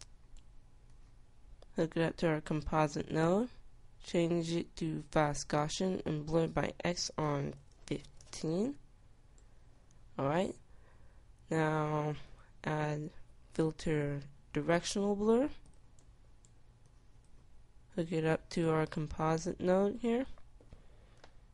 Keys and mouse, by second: 5.1-8.2 drag, 16.1-20.3 drag.